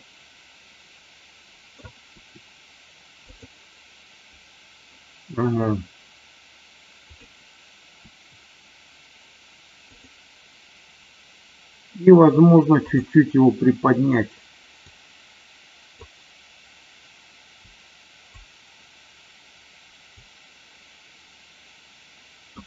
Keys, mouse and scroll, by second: 0.0-1.8 middle drag, 2.1 r, 3.2 click, 6.9 click, 7.9 r, 9.9 click, 12.8 click, 14.7-16.1 drag, 17.6 click, 20.1-22.6 drag.